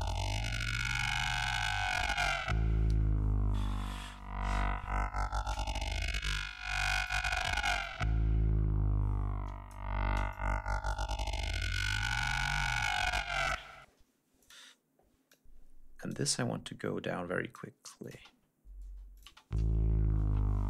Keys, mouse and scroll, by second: 0.6 ctrl+shift+scroll down 2, 0.9 ctrl+scroll up 2, 2.3 ctrl+scroll down 2, 2.7 ctrl+scroll up 2, 6.2 click, 7.7-9.8 drag, 10.2 click, 13.8 space, 14.3 click, 15.2 click, 16.6 click, 17.9 click, 18.0 space, 18.8 space, 19.0 click.